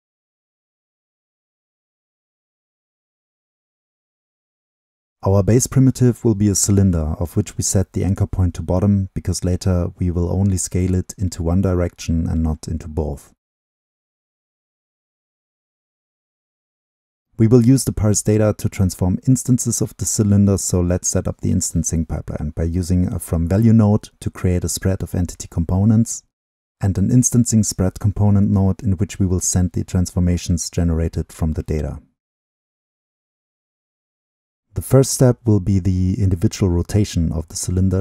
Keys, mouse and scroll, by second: 0.5-1.2 drag, 1.2-1.8 middle drag, 4.5-5.3 middle drag, 5.3 click, 5.3-9.7 middle drag, 10.1-12.5 middle drag, 12.5-13.1 drag, 13.1-13.6 middle drag, 13.6-14.6 right drag, 14.6-16.8 drag, 16.8-17.3 scroll down 2, 17.3-17.6 right drag, 18.1-18.9 right drag, 18.9 middle click, 19.0-21.3 drag, 21.3 middle drag, 21.4-22.1 drag, 22.1-22.5 scroll up 2, 22.5-24.1 middle drag, 24.1-26.5 drag, 27.8-31.3 drag, 32.5-34.0 drag, 34.0-34.3 scroll down 2, 34.3-34.9 drag, 37.4-38.0 middle drag.